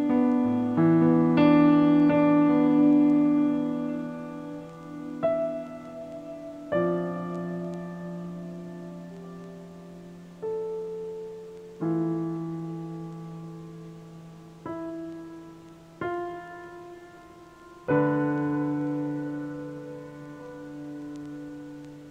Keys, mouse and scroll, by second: 0.7 scroll down 4, 3.5 scroll down 3, 5.5 KP_1, 5.9 KP_3, 6.5 KP_1, 7.2-7.9 scroll down 6, 7.9 g, 10.0 KP_0, 11.0-12.3 scroll up 4, 12.3 s, 14.9 g, 16.4 s, 18.1 g, 19.0-19.5 middle drag, 19.5-19.9 scroll down 5, 20.1-21.9 middle drag, 21.9 KP_0.